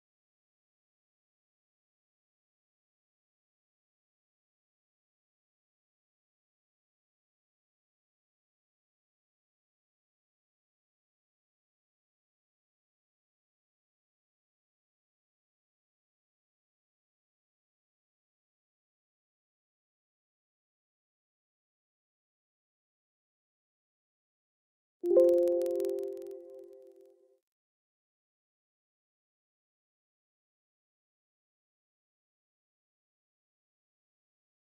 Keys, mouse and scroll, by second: 3.3 click, 16.1 click, 22.1-24.2 typing, 24.8 Return, 27.6 click, 30.3 click, 34.1 click.